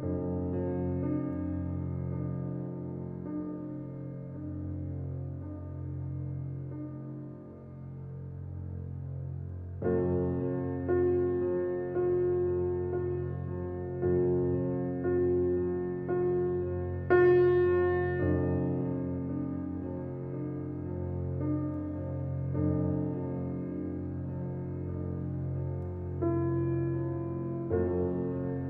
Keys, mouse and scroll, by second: 1.9 ctrl+r, 7.2 alt+middle click, 10.0 click, 13.7 alt+click, 15.5 alt+click, 16.4 scroll up 1, 16.8-19.3 middle drag, 19.3 scroll up 1, 20.0-21.3 shift+middle drag, 21.3 alt+e.